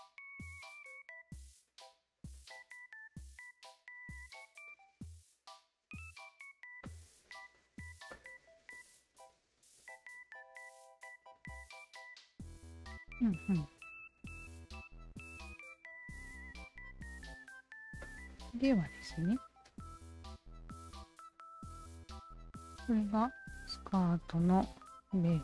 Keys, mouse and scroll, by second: 0.3 alt+click, 1.2 alt+shift+click, 2.2 alt+click, 2.6 alt+click, 4.1 alt+click, 4.6 alt+shift+click, 5.4 alt+click, 5.7 alt+click, 6.8 alt+click, 8.1 alt+click, 8.4-9.6 alt+drag, 9.8 alt+click, 10.5-17.8 alt+drag, 18.0 alt+click, 18.3 alt+click, 21.4 alt+click, 22.2 alt+right click, 22.9 alt+click, 23.7 Tab, 24.0 alt+click, 25.3 alt+click.